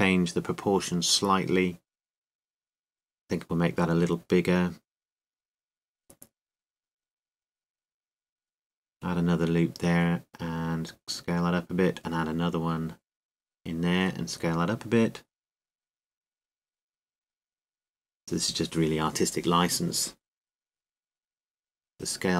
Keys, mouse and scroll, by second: 0.5 z, 1.4 z, 3.9-5.6 middle drag, 5.7 s, 8.3-11.3 drag, 9.6 ctrl+r, 11.4-14.7 drag, 12.0 s, 13.9 ctrl+r, 16.2-18.0 drag, 16.6 s, 18.1-19.6 drag, 19.6 middle click.